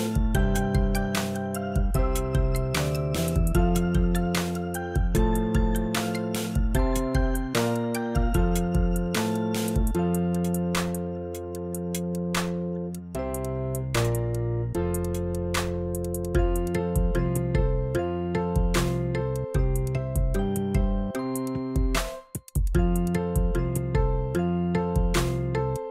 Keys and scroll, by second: 15.5 super+j.